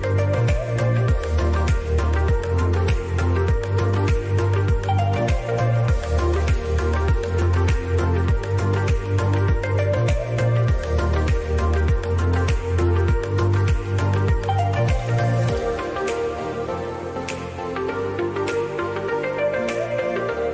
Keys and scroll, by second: 13.2 KP_Add, 13.9 KP_Subtract, 17.0 Delete.